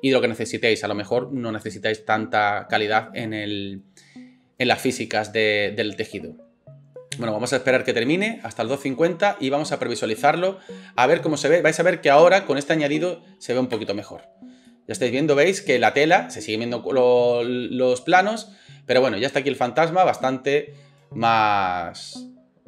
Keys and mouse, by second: 13.8 space.